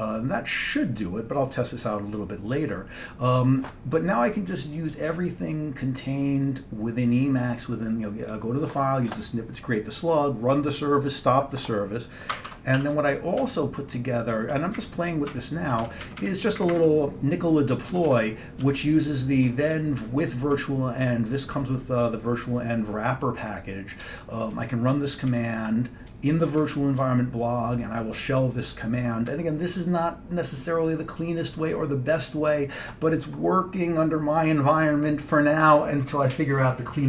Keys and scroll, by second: 12.4 Escape, 12.6 Escape, 12.9 c, 13.5 Down, 14.0 Down, 14.2-14.5 Down, 14.8 Up, 15.4 Tab, 15.8 Down, 15.9 Down, 16.1 Down, 16.3 Down, 16.6 Up, 16.8 Up, 16.9 Right, 17.5-17.8 Right, 18.0 Down, 18.7 Left, 19.2 Left, 19.8 Right, 20.3 typing, 20.4 Right, 24.6-29.4 Right.